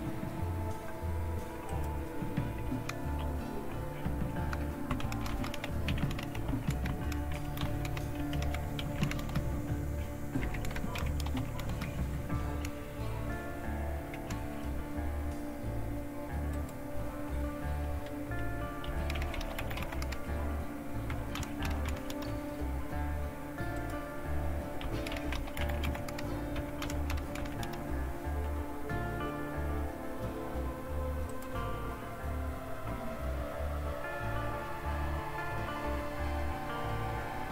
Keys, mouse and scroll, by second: 1.7 click, 2.7 BackSpace, 3.3-4.2 Left, 5.1-9.5 typing, 10.8-11.9 typing, 12.5 Delete, 13.0-14.1 typing, 16.5-17.9 drag, 18.6-22.4 typing, 23.8-25.0 drag, 24.6-27.9 typing, 25.1 click, 31.3 click.